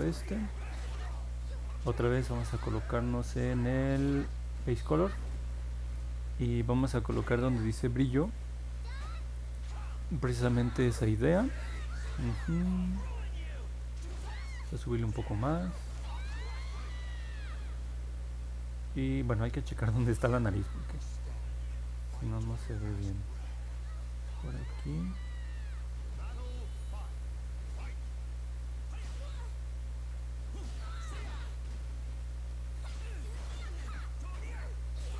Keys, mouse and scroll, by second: 23.3 click, 25.3 click, 26.2 click, 27.0 click, 28.4 click, 29.0 click, 29.7 click, 30.4 click, 31.2 click, 31.9 click, 32.6 click, 33.3 click, 33.9 click, 34.4 click.